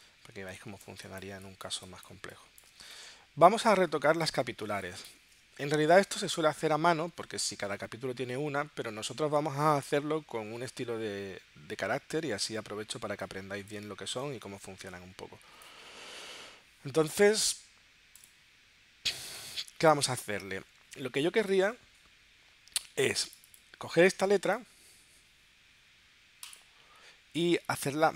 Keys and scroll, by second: 0.3 space, 4.7 space, 5.2 space.